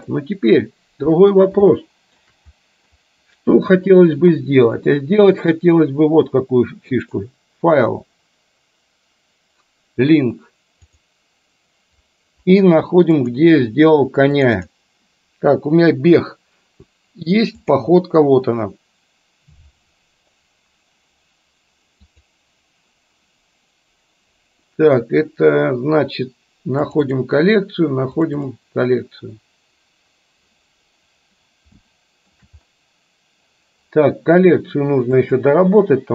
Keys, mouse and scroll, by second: 1.8-2.4 shift+middle drag, 7.0-11.3 drag, 31.9-32.4 shift+middle drag, 35.3-36.1 drag.